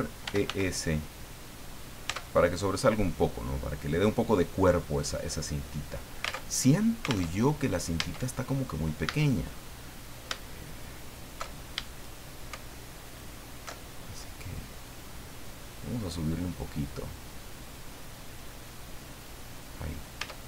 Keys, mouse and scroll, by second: 0.0-0.9 typing, 1.6 click, 2.0 Tab, 2.4-2.9 scroll down 2, 2.9-4.5 middle drag, 5.7 scroll down 2, 6.4 alt+Tab, 7.2 alt+Tab, 7.6-8.0 alt+scroll up 3, 8.0 Tab, 9.0 a, 9.4-10.0 scroll up 2, 10.9 alt+shift+right click, 11.5-11.8 alt+shift+scroll up 1, 11.8 alt+shift+middle click, 13.0 alt+shift+right click, 13.9-14.7 alt+shift+scroll down 1, 17.0-19.8 drag, 20.0-20.4 scroll down 2, 20.2 Tab.